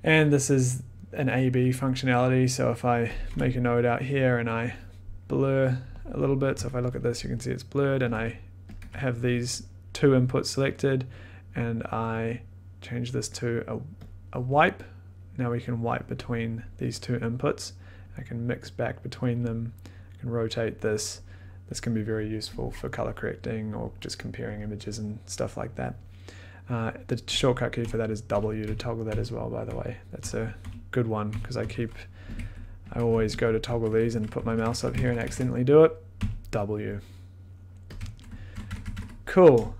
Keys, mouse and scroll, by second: 3.1 click, 3.3 b, 4.5 click, 5.5 click, 6.5 click, 6.6 1, 8.1 click, 8.1 1, 8.7 click, 8.8 2, 12.2 click, 14.0 click, 19.3 click, 21.2 click, 23.8 click, 27.8-31.3 typing, 32.3 click, 32.3-35.7 typing, 32.9 click, 38.6-39.7 typing, 39.6 click.